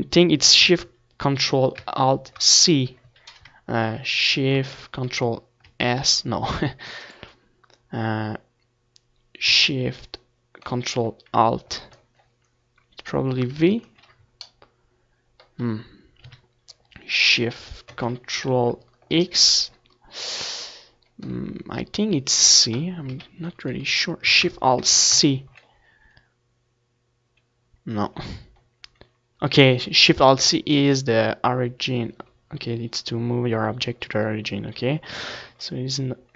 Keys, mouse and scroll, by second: 3.4 ctrl+shift+s, 3.4-5.1 drag, 12.6 ctrl+alt+shift+KP_3, 16.7-18.9 ctrl+alt+shift+middle drag, 18.9-20.8 drag, 19.7 KP_3, 29.8-36.3 middle drag.